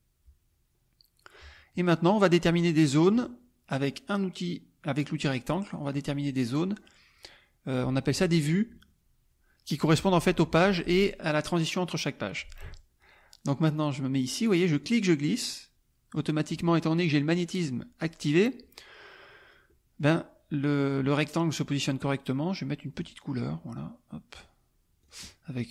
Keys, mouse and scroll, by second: 2.2 click, 2.7 click, 5.7 click, 14.8-16.7 drag, 19.7 middle click, 23.0 click, 24.3 click, 25.0 click.